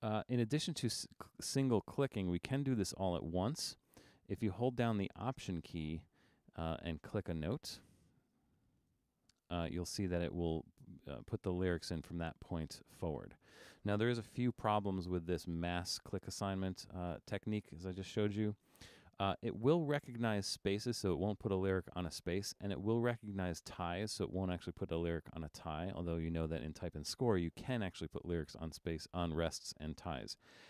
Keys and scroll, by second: 16.2 super+=, 16.9 super+=.